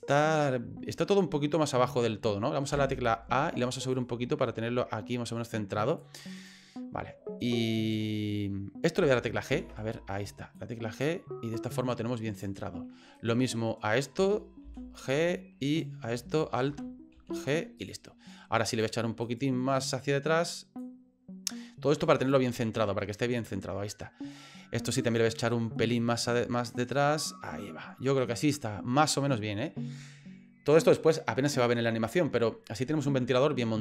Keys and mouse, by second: 2.7 a, 4.0-6.0 drag, 6.4 right click, 7.7 right click, 9.5 alt+g, 10.6-12.4 drag, 13.1 right click, 14.6 alt+g, 15.7 right click, 16.7 alt+f, 17.1 alt+g, 17.8 right click, 18.7 right click, 19.3 right click, 19.8 right click, 20.8-22.3 drag, 22.8-24.5 middle drag, 25.0 right click, 25.9-27.2 drag, 27.5-29.4 middle drag.